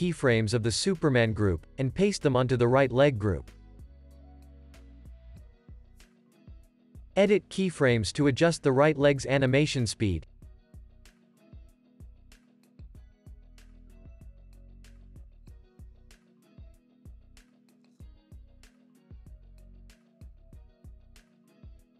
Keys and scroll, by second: 1.8 super+v, 2.6 space, 5.1 space, 6.7 z, 11.9 space, 14.8 space.